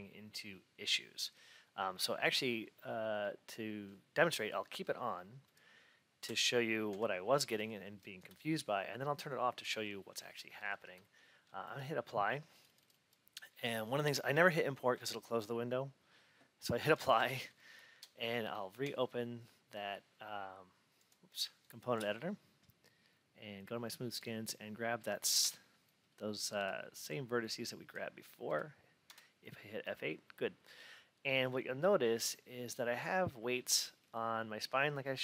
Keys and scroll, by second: 6.1 F8, 25.3 F8.